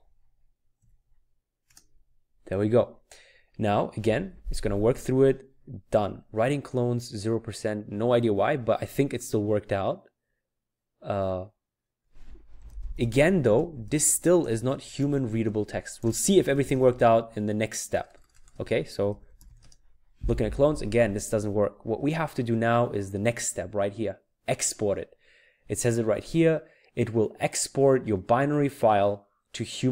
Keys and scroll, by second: 0.0-0.8 typing, 1.6 Return, 12.3-19.9 typing.